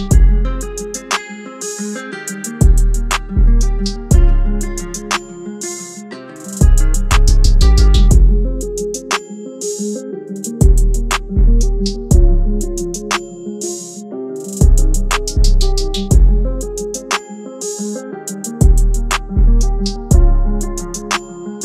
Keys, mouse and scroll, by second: 2.4 [, 5.5 double click.